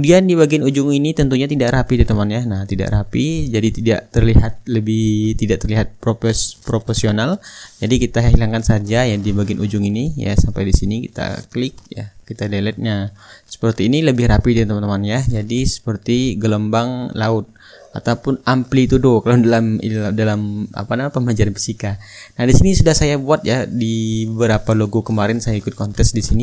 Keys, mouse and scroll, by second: 2.7-3.9 middle drag, 4.8-6.7 drag, 7.9-11.6 drag, 12.0-13.1 drag, 13.3-15.8 drag, 14.2-15.8 right drag, 19.4 click, 19.8-21.4 middle drag, 22.2-23.7 drag, 24.7 click, 25.6-26.4 middle drag.